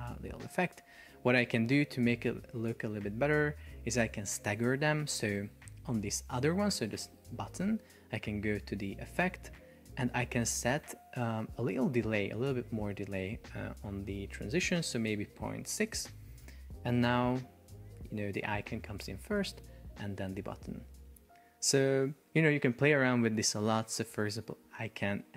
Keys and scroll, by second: 0.7 Escape, 2.9 super+p, 5.1 Escape, 13.7 Up, 15.7 Return, 16.1 super+p, 17.4 super+r, 19.6 super+r, 21.0 Escape.